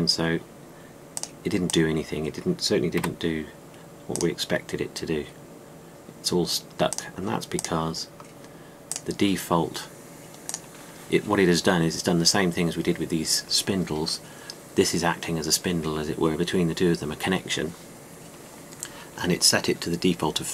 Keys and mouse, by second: 2.0-3.8 drag, 3.8 a, 9.0-9.8 drag, 9.8-11.4 middle drag, 12.7-17.8 drag.